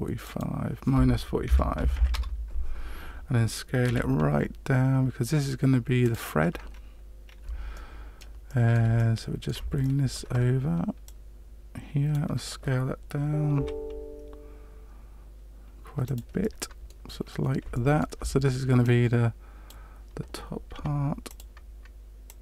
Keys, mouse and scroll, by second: 0.2 click, 3.8 s, 6.6-7.4 scroll up 5, 7.7 shift+middle click, 8.4 shift+middle click, 8.9 middle click, 9.8 shift+middle click, 11.0 click, 13.5 s, 16.4 middle click, 17.2 scroll up 2, 17.7 shift+middle click, 18.8 click, 20.7 s, 22.2 click.